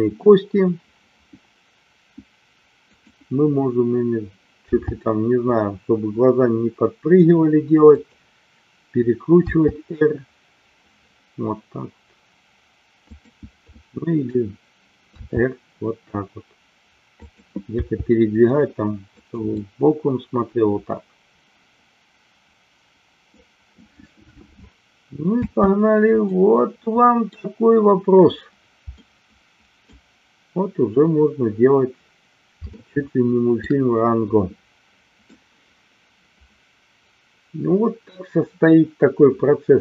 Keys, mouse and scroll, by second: 3.0 click, 4.6 g, 8.0 click, 9.5 r, 13.2 click, 13.7 middle click, 15.1 r, 17.7 g, 19.2 click, 19.5-23.2 middle drag, 23.2 scroll down 1, 23.3 middle click, 25.2 space, 26.2-27.5 middle drag, 29.0 shift+middle click, 32.9 shift+middle click, 35.3-39.8 middle drag.